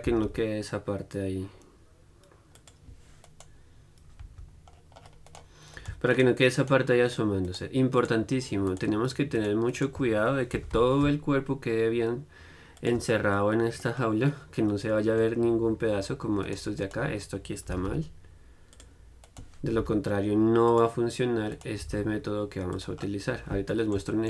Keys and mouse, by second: 2.9-10.8 drag, 10.8-13.0 right drag, 10.8 g, 13.1 click, 13.4 middle click, 13.9 click, 15.0-16.7 middle drag, 16.7-19.0 right drag, 19.0 click, 19.5-21.0 middle drag, 20.0 g, 21.0-23.0 right drag, 23.0 middle click, 23.9 click.